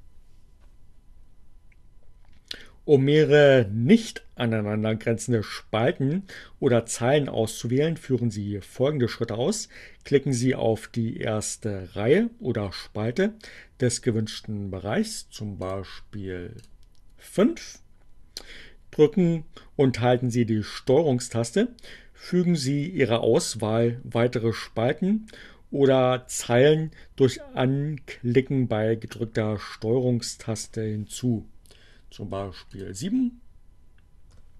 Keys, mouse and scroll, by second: 15.2 click, 16.6 click, 32.7 shift+click.